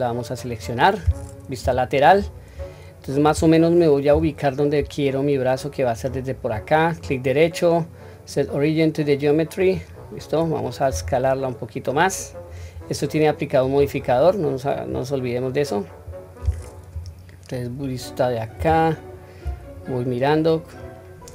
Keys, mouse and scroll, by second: 0.4 click, 1.6 KP_3, 2.1-3.5 scroll up 1, 3.5-3.9 scroll up 3, 4.1 g, 6.9-9.7 right drag, 13.6 click, 14.9-16.8 scroll down 1, 16.9 KP_1, 18.6 KP_3, 19.7 scroll down 1.